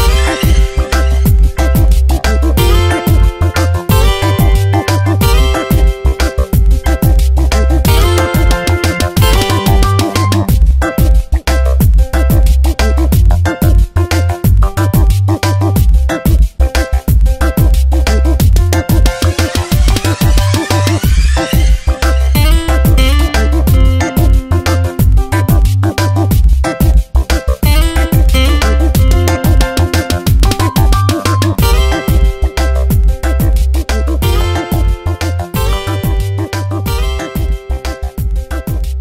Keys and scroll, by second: 0.0 ctrl+z, 0.9 s, 2.9 Tab, 3.2 space, 3.8 v, 5.9 space, 7.1 space, 10.4 Tab, 15.0 Tab, 16.5 Tab, 16.7 space, 17.3 v, 20.5 ctrl+shift+], 21.9 ctrl+t, 24.6 Return, 25.4 m, 26.7 space, 30.9 ctrl+j, 31.4 v, 32.4 Delete, 33.6 ctrl+t.